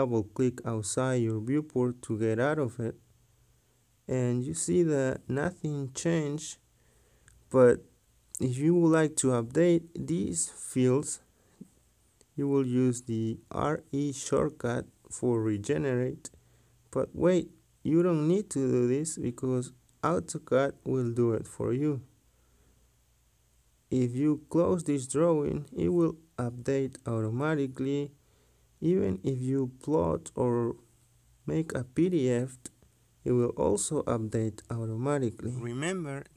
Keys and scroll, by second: 13.8-14.2 typing, 21.0 Escape.